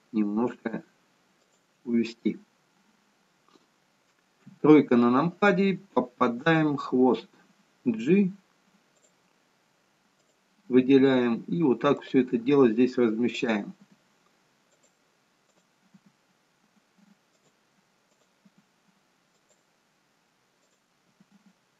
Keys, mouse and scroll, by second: 4.4 KP_3, 6.6 click, 8.1 g, 10.3 click, 10.9 g, 13.4 click, 13.9 g, 15.6 click, 16.0 g, 18.2 click, 18.6 g, 20.8 click, 21.3 g.